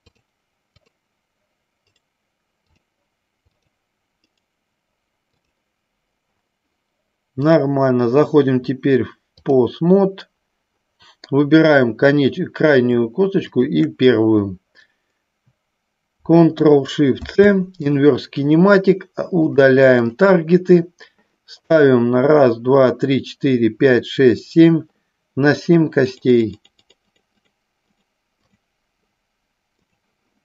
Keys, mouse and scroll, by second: 1.0 click, 3.8 click, 7.6-9.7 drag, 13.6-15.9 shift+drag, 20.4 click, 26.2 click, 26.6-27.8 drag, 28.2 click, 28.7 click, 30.0 click.